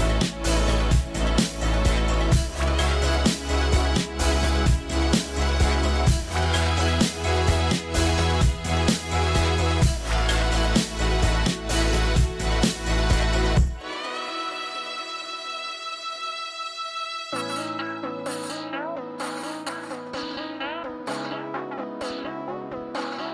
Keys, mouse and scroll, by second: 4.0 middle click, 21.6 middle click, 22.0-22.3 scroll up 1, 22.3 middle click.